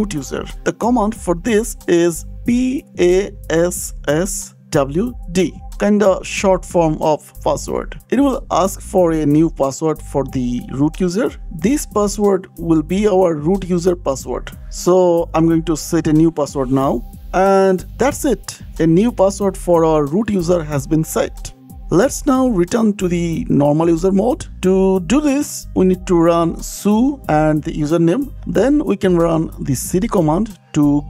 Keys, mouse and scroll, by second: 0.1 click, 1.4 click, 2.9-5.0 typing, 5.8 Return, 10.4-11.7 typing, 12.2 KP_Enter, 13.4-14.9 typing, 15.3 KP_Enter, 18.3 click, 20.4 scroll down 2, 21.3 click, 22.9 click, 24.1 click, 24.8 s, 25.1 u, 25.8 space, 27.2-28.3 typing, 28.4 Return, 29.6-30.5 typing.